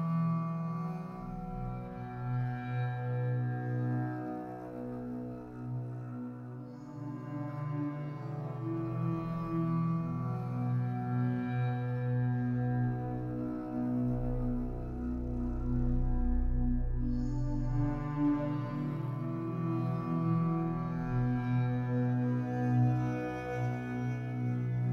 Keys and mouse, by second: 0.4 click, 3.7-5.0 drag, 6.2 click, 7.3-8.3 right drag, 8.3 click, 9.0 click, 9.2 click, 11.0-11.8 typing, 13.2-15.7 typing, 17.5-20.4 typing, 22.4-24.9 drag.